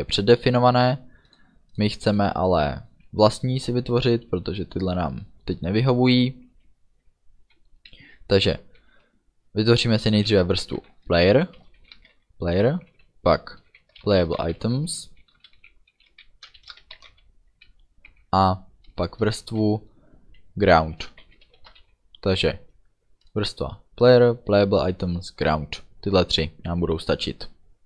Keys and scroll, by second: 10.8-12.0 typing, 14.1-15.6 typing, 16.6-17.6 typing, 21.1-21.9 typing.